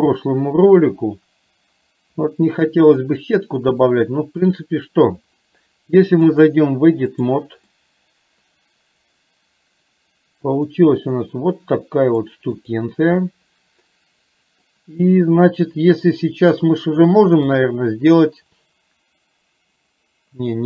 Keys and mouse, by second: 0.3 shift+middle click, 3.2 middle click, 4.5 click, 6.5 click, 7.8-12.3 middle drag, 12.7 click, 13.3-14.7 middle drag, 17.7 click.